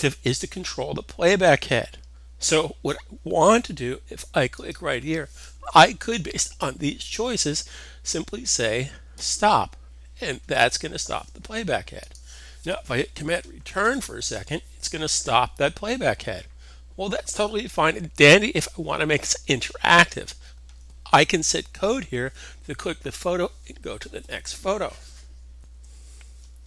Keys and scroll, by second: 25.5 super+Tab.